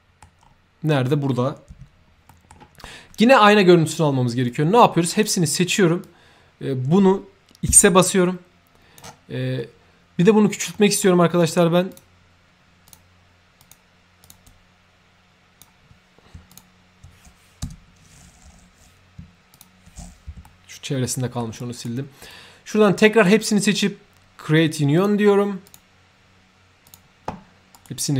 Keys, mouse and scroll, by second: 0.4 scroll up 2, 2.3 middle click, 2.8 middle click, 4.5-5.2 drag, 6.0-8.9 drag, 9.5 middle click, 9.6 x, 10.7 middle click, 11.3 click, 11.8 click, 12.8 click, 13.5 click, 14.2 click, 14.4-15.5 drag, 16.4 click, 17.7 shift+Tab, 19.5 click, 20.4-21.3 shift+middle drag, 21.5 shift+right click, 22.2-23.2 shift+drag, 23.7 shift+right click, 24.9 shift+click, 25.6 shift+click, 26.8 shift+click, 27.7 shift+right click.